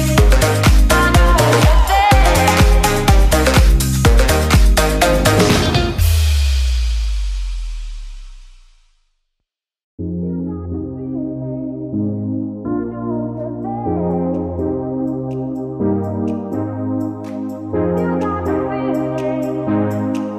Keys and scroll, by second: 0.1 ctrl+v, 6.2 ctrl+y, 6.6 ctrl+space, 7.4 ctrl+alt+space, 10.1 ctrl+y, 10.5 ctrl+space.